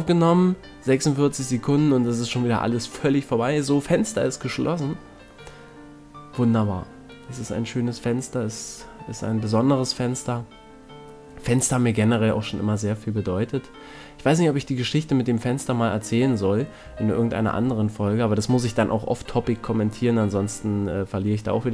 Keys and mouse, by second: 0.1-1.7 middle drag, 1.7 f, 1.9 a, 2.4-3.9 middle drag, 3.3 ctrl+Tab, 4.4 middle click, 5.1 middle click, 6.4 e, 7.3 KP_1, 8.0 s, 11.8-12.8 middle drag, 12.8 e, 15.1 click, 15.4 middle click, 16.5-18.4 drag, 16.5 right click, 20.1 a, 20.4-21.7 middle drag.